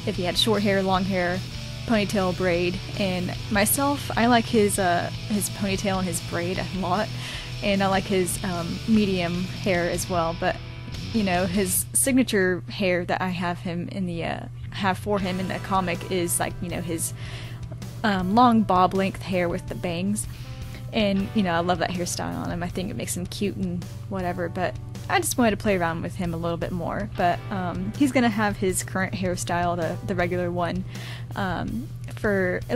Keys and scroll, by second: 9.3-10.2 typing, 11.3-11.7 typing.